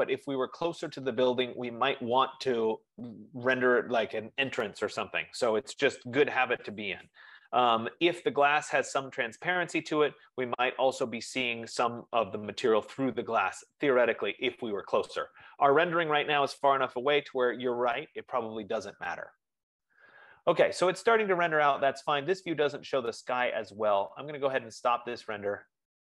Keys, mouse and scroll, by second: 24.9 click.